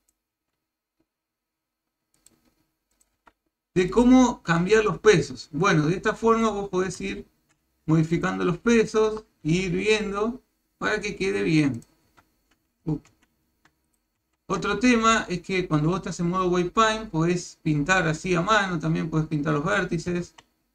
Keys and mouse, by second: 0.0 click, 0.3 r, 3.0 click, 3.2 r, 7.0 ctrl+Tab, 8.1 ctrl+click, 8.9 ctrl+click, 9.4 r, 11.8 click, 12.1 r, 14.2 ctrl+z, 17.5-20.1 drag, 20.3 ctrl+z.